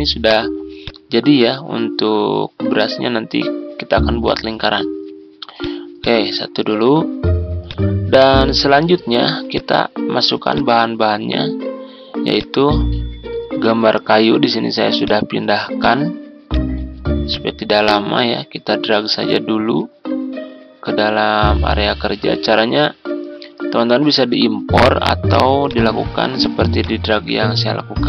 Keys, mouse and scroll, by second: 6.3-6.9 ctrl+scroll down 2, 7.6-11.5 drag, 12.6 click, 13.0 ctrl+v, 14.9-28.0 drag.